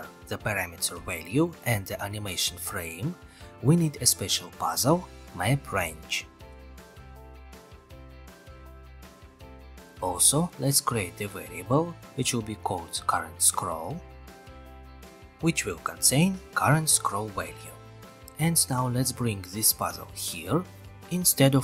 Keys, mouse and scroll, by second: 5.3 click, 8.4-9.5 drag, 10.0 click, 11.0 click, 11.9-12.9 drag, 13.0-16.2 typing, 15.8-16.3 scroll, 17.7-18.8 drag, 20.4-21.5 drag.